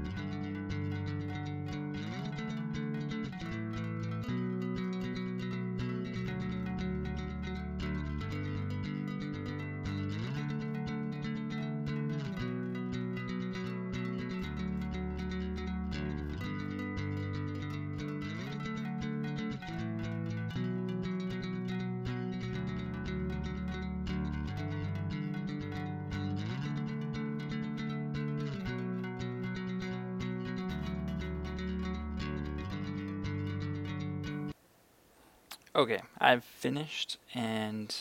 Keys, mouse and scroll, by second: 0.3 a, 0.4 b, 2.7 a, 2.9 b, 3.2 click, 6.4-10.6 typing, 6.5 click, 6.9 click, 8.5 click, 10.0 click, 11.0-14.9 drag, 15.5 Tab, 15.8 right click, 15.9 a, 16.2 Tab, 16.8 right click, 17.2 Tab, 17.3 right click, 17.7 click, 19.0 x, 20.1 Escape, 20.3-21.3 typing, 20.5 click, 21.6 click, 22.5 typing, 22.7 Return, 23.1 Tab, 23.5 right click, 24.5 Tab, 24.9 click, 25.1 scroll down 1, 25.3 scroll up 1, 25.8-28.5 drag, 29.3 Return, 29.7 right click, 30.5 b, 30.7 click, 31.4 middle click, 32.3 click, 34.0 Tab, 34.3 g, 34.4 click.